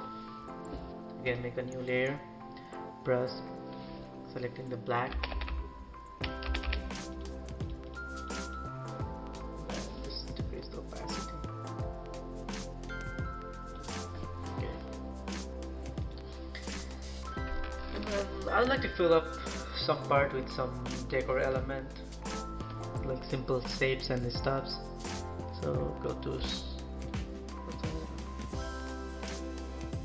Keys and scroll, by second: 5.2 ], 5.4 ], 6.4 ], 6.6 ].